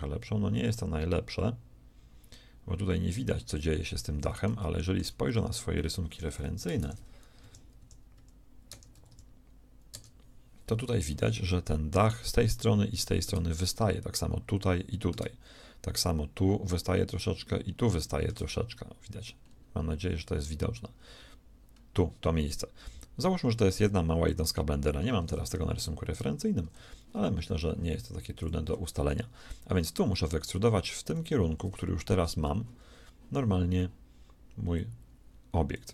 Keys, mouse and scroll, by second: 3.7-6.0 middle drag, 29.7 middle click, 30.4 middle click, 30.6 z, 31.2 z, 34.7-35.9 drag.